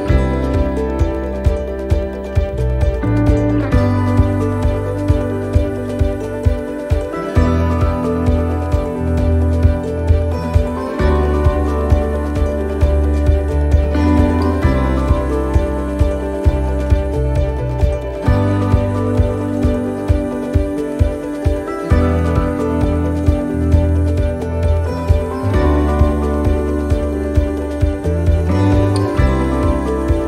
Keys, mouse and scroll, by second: 3.1 click.